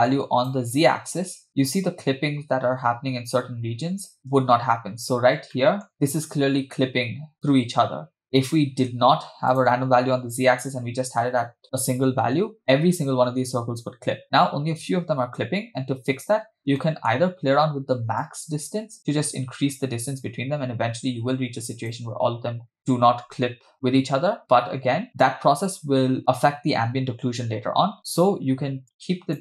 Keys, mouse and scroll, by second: 1.0 space, 4.9-6.8 scroll up 3, 5.5-5.9 shift+middle drag, 8.1-8.6 scroll down 3, 8.2 shift+middle click, 9.6 click, 14.2-14.6 scroll down 3, 16.8-17.9 scroll up 3, 16.9 middle click, 17.9-18.2 scroll up 1, 18.3-22.0 shift+drag, 25.3 space, 28.8 shift+click.